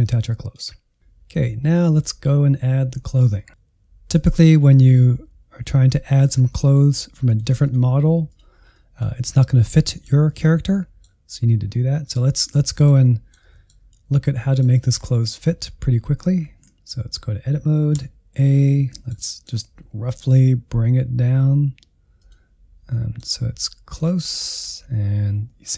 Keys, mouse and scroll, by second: 0.3 click, 0.7-2.0 middle drag, 2.0-3.7 drag, 3.7 middle click, 4.1 click, 4.7 Insert, 6.5-8.7 drag, 8.7-16.4 middle drag, 16.4 Tab, 18.0 a, 18.5 scroll up 1, 18.7-20.2 middle drag, 20.2 g, 22.9-23.9 middle drag, 23.9 click, 24.6-25.1 scroll up 3.